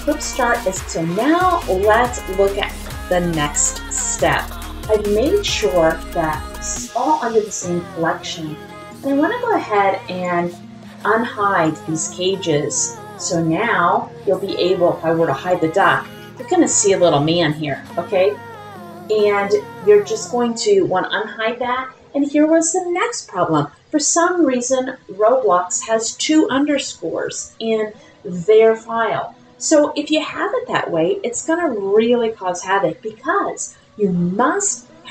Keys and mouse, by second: 8.8 click, 10.2 click, 11.6 click, 15.5 click, 19.0 click.